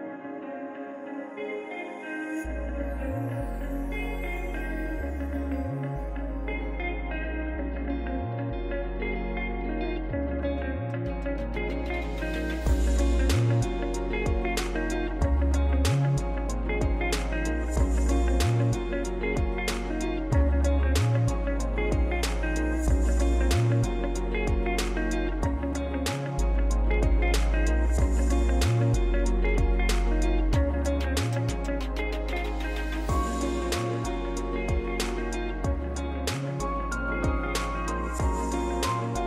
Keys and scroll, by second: 9.1 ctrl+s, 12.4 Delete, 13.0 Tab, 13.1-14.2 typing, 16.7-17.5 typing, 25.7-26.6 typing, 38.1-39.2 typing.